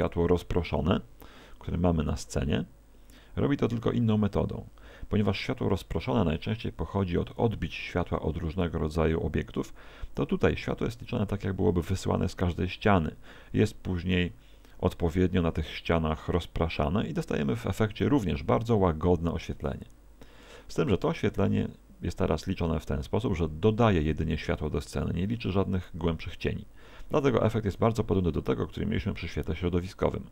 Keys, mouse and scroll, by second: 0.0 click.